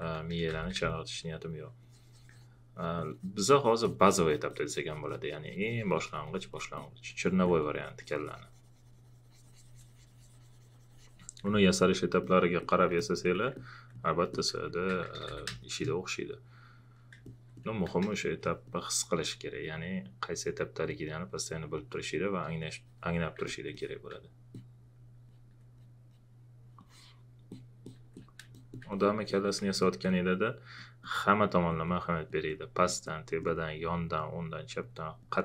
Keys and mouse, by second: 0.1-1.0 typing, 0.9 click, 13.5 alt+click, 14.5-15.7 typing, 15.5 click, 18.2 space, 18.2 click, 23.4 alt+click, 24.5 click, 25.3 alt+click, 29.8 alt+click.